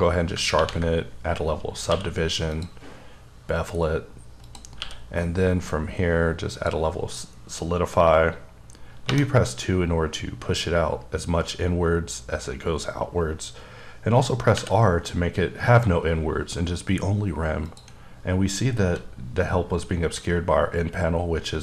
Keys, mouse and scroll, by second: 0.6 ctrl+1, 1.9 q, 2.5 click, 3.4-4.4 scroll up 6, 4.4 click, 4.8 q, 6.5 click, 9.1 2, 14.5 r, 18.9 n.